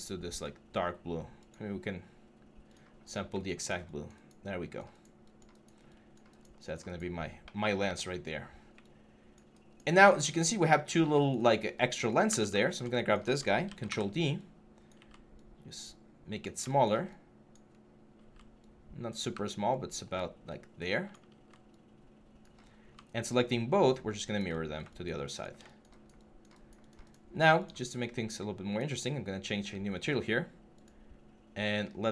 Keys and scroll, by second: 13.4 ctrl+d.